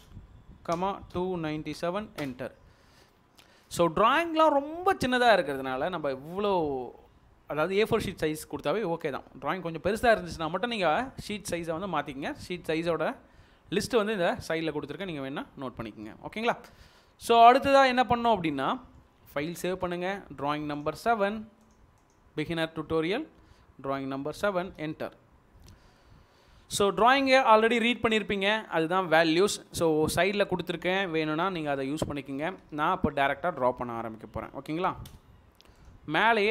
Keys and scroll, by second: 0.0-1.7 typing, 20.0 ctrl+s, 22.6 BackSpace, 24.6 7, 24.7 Return, 32.5 l, 35.1 Return.